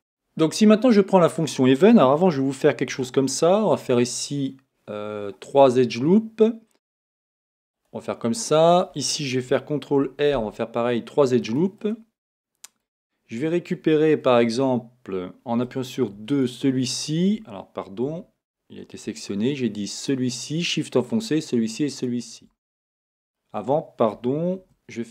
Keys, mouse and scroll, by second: 2.9 ctrl+r, 7.9 click, 11.6 ctrl+r, 11.9 click, 15.7 2, 16.3 shift+click, 18.1 a, 20.0 shift+click, 20.9 shift+click, 21.9 shift+click, 22.8-25.1 middle drag, 24.6 ctrl+r.